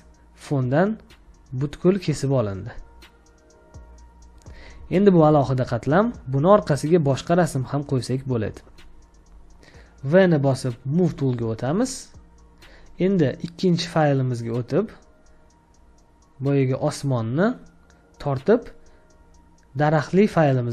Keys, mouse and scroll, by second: 4.7 ctrl+click, 6.3 ctrl+click, 7.5 ctrl+click, 11.0 v, 15.6-17.5 scroll down 1.